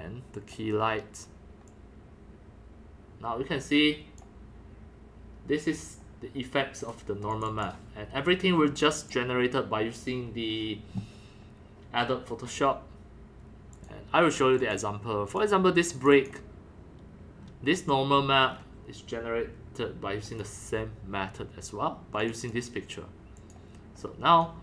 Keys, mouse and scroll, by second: 0.4 click, 0.5-0.9 drag, 0.8-1.6 scroll up 1, 1.6-2.6 scroll up 1, 1.7-3.5 drag, 3.3 scroll, 3.5 middle click, 4.2-7.0 drag, 7.3 click, 7.5 click, 8.0 scroll down 3, 9.0 click, 9.1-10.1 drag, 10.5-13.6 drag, 15.4 click, 16.0 click, 16.1 click, 17.4 scroll up 4, 18.1-18.5 scroll up 6, 18.5-18.9 middle drag, 18.5 scroll, 18.9-19.5 scroll down 6, 18.9 middle click, 19.8 middle click, 20.3 click, 20.3 scroll down 1, 20.5-24.6 drag.